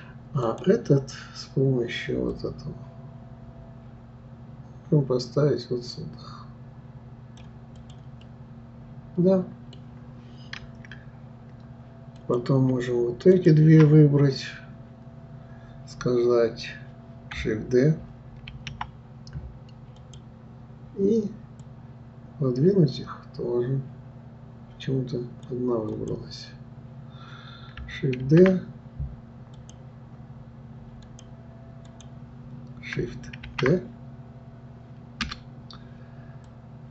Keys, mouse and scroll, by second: 0.4 click, 2.3-5.3 drag, 7.8 click, 8.2-11.2 middle drag, 12.2 click, 13.3 shift+click, 18.5 shift+d, 21.6-24.6 drag, 25.9-28.9 drag, 31.0 click, 31.9 click, 33.4 shift+d, 36.5-36.9 drag.